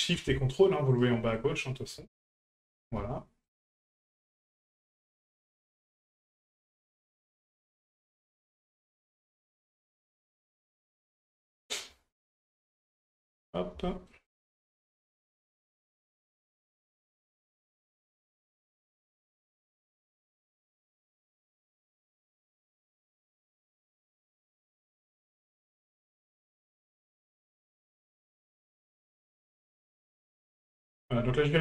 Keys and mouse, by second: 0.9 ctrl+right click, 1.3-1.6 middle drag, 2.5 shift+right click, 3.4 ctrl+right click, 3.8-4.1 middle drag, 4.6 shift+right click, 4.9-5.2 middle drag, 5.8 shift+right click, 6.1 shift+right drag, 6.7 shift+right click, 7.0-7.3 middle drag, 8.0 shift+right drag, 8.7 ctrl+right click, 9.0 middle drag, 9.8 ctrl+right click, 10.1 shift+middle drag, 10.5 middle drag, 11.2 ctrl+right click, 11.5 middle drag, 13.1 ctrl+right click, 13.3 middle drag, 13.8 shift+middle drag, 14.3 middle drag, 15.8 shift+right click, 16.1 shift+right drag, 16.4-16.8 middle drag, 17.0 shift+middle click, 18.2 shift+right click, 18.5 shift+right click, 19.0 shift+right click, 19.3 middle click, 20.5 shift+right click, 20.9 shift+middle click, 21.9 ctrl+right click, 22.1 middle click, 22.5 shift+middle click, 23.3 ctrl+right click, 23.5 middle click, 23.9 shift+middle click, 24.8 ctrl+right click, 25.1 middle click, 25.8 ctrl+right click, 26.2 shift+middle click, 27.1 middle click, 28.4 shift+right click, 28.8 shift+right click, 29.1 middle click, 29.7 shift+middle click, 30.5 shift+right click, 30.8 shift+right click, 31.5 middle click.